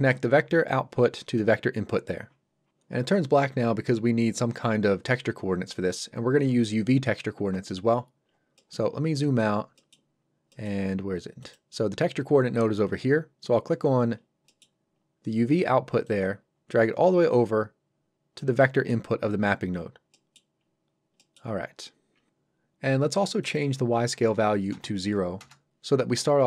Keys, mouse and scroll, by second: 8.0-8.3 scroll down 1, 8.6 middle click, 8.9 scroll down 1, 9.2 middle click, 11.4 click, 13.7 scroll up 1, 14.2 scroll down 1, 14.5 middle click, 15.0-16.1 scroll down 1, 16.1 click, 18.6 middle click, 19.8-20.1 scroll up 1, 20.1 middle click, 20.9-21.2 scroll up 1, 21.2 middle click, 21.5-22.2 scroll down 1, 23.5 click, 24.7 KP_0, 25.4 Return.